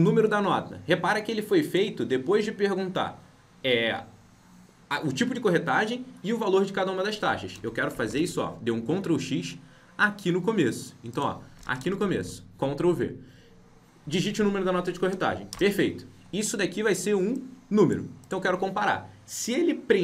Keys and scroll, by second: 7.5 ctrl+x, 15.5 ctrl+v.